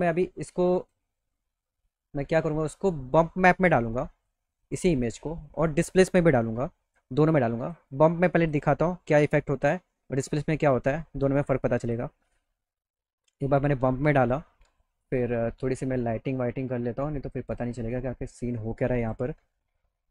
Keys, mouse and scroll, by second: 0.9 click, 4.3 click, 6.4 click, 7.3 click, 7.9 click, 8.7 scroll up 1, 9.5 click, 10.9-11.9 drag, 13.6 click, 17.5 click, 19.0 click.